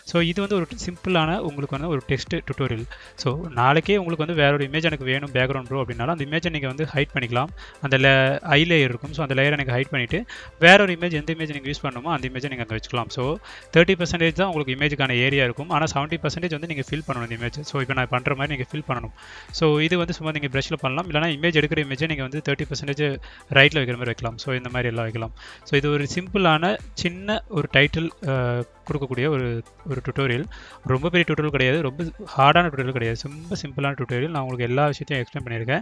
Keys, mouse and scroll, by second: 3.0 click, 7.4 click, 11.9-12.5 scroll down 1, 13.3 click, 14.3 click, 14.9-17.0 drag, 17.3 click, 17.5 click, 17.7 click, 18.1 click, 18.3 click, 20.2 click, 20.5 click, 20.7 click, 21.4 click, 21.7 click, 21.9 click, 22.7 click, 26.1 click, 26.3 click, 26.5 click, 26.7 click, 27.1 click, 27.4 click, 28.1 click, 28.3 click, 28.7 click, 29.3 click, 29.4 click, 29.6 click, 30.2 click, 30.7 click, 31.5 click, 32.1 click, 34.7 click.